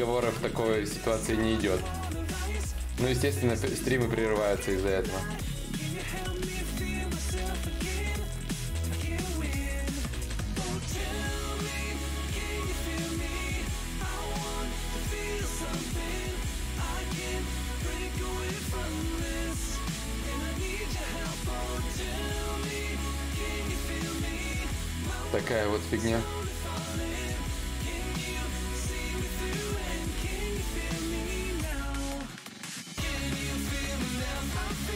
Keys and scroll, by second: 0.7 ctrl+z, 1.4 ctrl+z, 2.3 ctrl+shift+z, 26.4 b.